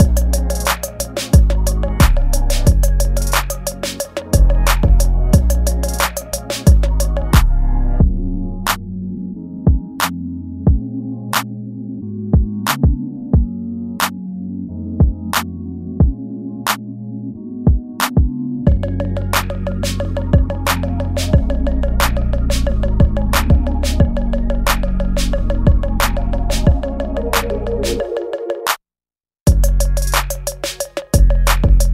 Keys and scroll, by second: 0.8 ctrl+z, 1.3 space, 1.4 ctrl+z, 1.9 space, 2.4 ctrl+z, 4.2 space, 5.3 space, 7.4 space, 7.5 ctrl+z, 8.7 ctrl+z, 11.8 ctrl+z, 14.7 ctrl+z, 16.4 ctrl+z, 21.7 ctrl+s, 23.3 ctrl+s, 26.4 space.